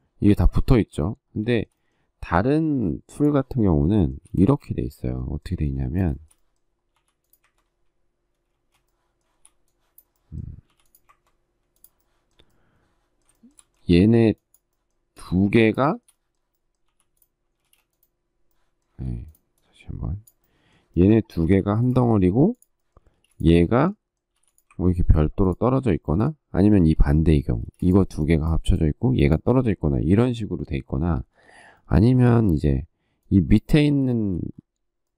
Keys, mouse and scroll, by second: 1.3 shift+middle click, 1.3 shift+scroll, 1.4 shift+middle click, 3.3 shift+middle click, 3.7 shift+middle click, 4.2 space, 5.9 shift+middle click, 6.7 m, 8.3 ctrl+space, 10.4 m, 13.1 shift+middle click, 13.6 space, 15.6 shift+middle click, 16.6 m, 18.6 space, 21.2 m, 22.8 ctrl+space, 24.1 m, 27.3 space, 31.9 shift+middle click, 33.9 shift+middle click.